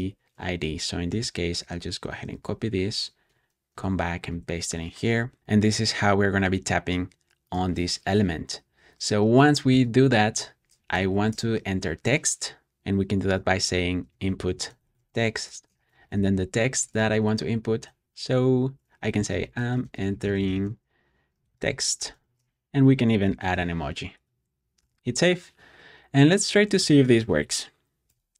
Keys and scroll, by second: 0.0 shift+super+], 0.5 Escape, 0.7-2.4 typing, 2.8 shift+super+[, 3.2 Escape, 3.6 p, 4.2 super+s, 8.5 ↺, 9.6-11.2 typing, 13.0-16.9 typing, 19.1-22.6 typing, 23.3 ctrl+super+space, 24.1 Return, 24.7 super+s, 28.0 Return.